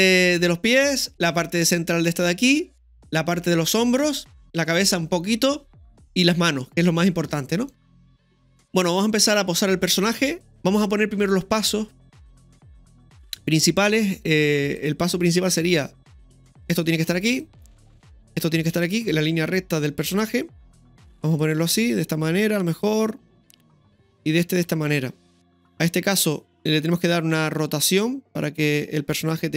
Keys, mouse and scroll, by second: 7.0-8.4 middle drag, 8.4 click, 8.4 scroll down 2, 10.4 shift+middle click, 10.4-11.6 scroll down 1, 12.8 right click, 14.8 right click, 14.8-16.7 drag, 16.4-17.9 typing, 17.3 right click, 18.0-19.8 drag, 19.6-20.3 typing, 21.4-23.7 drag, 23.7 right click, 24.6-25.4 drag, 26.9 right click, 27.7 r.